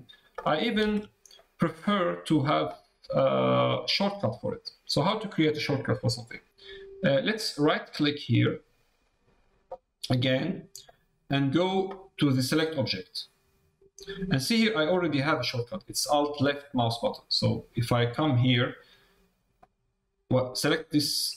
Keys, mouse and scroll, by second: 0.8 alt+a, 1.3 middle click, 19.6 click.